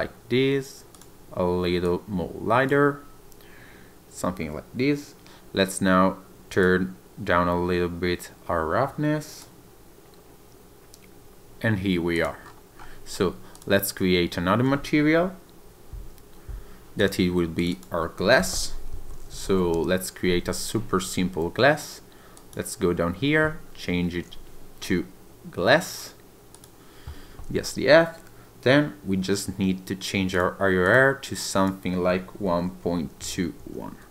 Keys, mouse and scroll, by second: 0.9 click, 6.6 click, 12.1 click, 12.4 scroll down 2, 12.8 scroll up 1, 13.5 click, 17.0 click, 17.6 click, 17.7 click, 19.4 s, 22.3 click, 30.3 click.